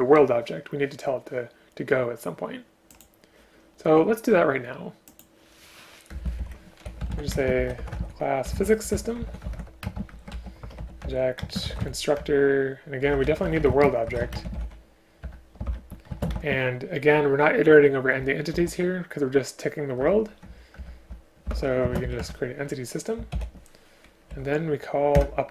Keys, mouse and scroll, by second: 6.2 Return, 6.3 Return, 6.4 Up, 7.4 space, 9.9 space, 11.1 Return, 11.5 space, 12.2 Return, 14.4 space, 15.3 Return, 16.2 space, 20.8 Return, 21.9 space, 22.2 Return, 23.3 ctrl+o, 24.3 Down, 25.2 Return.